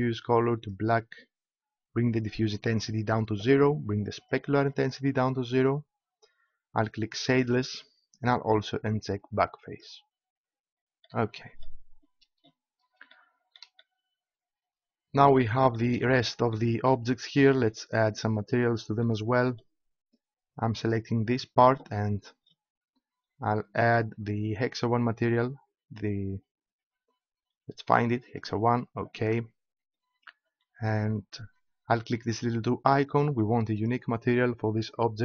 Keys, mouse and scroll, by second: 2.1-4.6 drag, 9.1 click, 20.7-22.3 right drag, 23.7-25.6 drag, 32.9-35.2 drag.